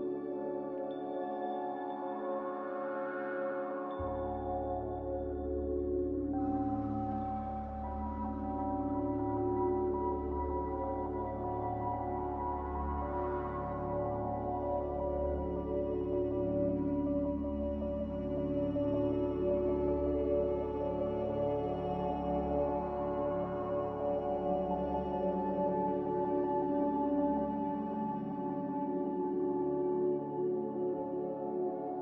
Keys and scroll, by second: 0.9 ctrl+c, 9.2 ctrl+c, 12.3 ctrl+v, 18.2 z, 20.8 Delete, 25.0 ctrl+c, 28.0 ctrl+v, 30.4 ctrl+c.